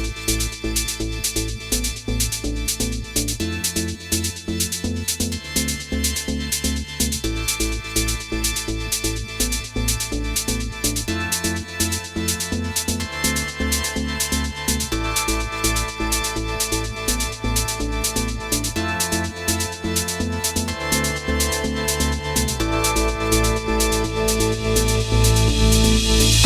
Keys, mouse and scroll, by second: 1.0 middle click, 2.0 click, 3.9 click, 5.1 middle click, 6.2 click, 6.9 scroll down 2, 7.1 middle click, 7.5-8.7 scroll up 3, 8.0 middle click, 9.1 click, 10.9 shift+f, 11.8 click, 12.6 click, 12.9 click, 13.2 shift+f, 13.7 click, 14.2 click, 14.5 click, 14.8 click, 15.1 click, 20.6 click, 22.5 click, 23.7 click, 24.3 click, 25.0 click, 25.6 click, 26.1 click.